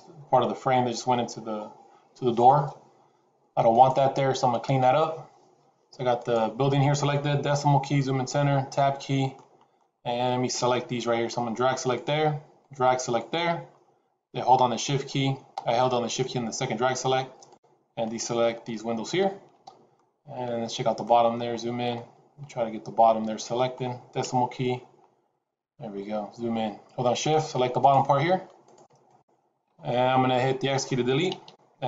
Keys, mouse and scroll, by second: 6.1 click, 7.4 KP_Decimal, 8.5 Tab, 9.2 middle click, 9.8 scroll up 3, 11.2 click, 12.5 shift+click, 17.3 shift+click, 19.1 shift+click, 19.9 middle click, 21.1 scroll up 2, 21.9 middle click, 24.1 KP_Decimal, 24.9 scroll up 1, 25.9-26.3 scroll up 1, 27.0 shift+click, 27.7 shift+click, 28.6 shift+click, 29.2 shift+click, 29.5 shift+scroll down 2, 29.8 middle click, 31.2 x.